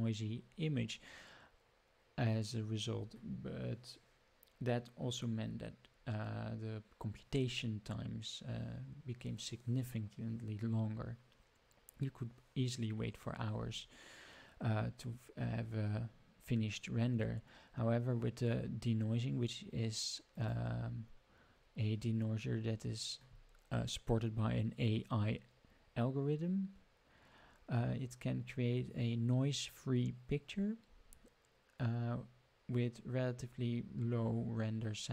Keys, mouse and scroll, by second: 20.3 click.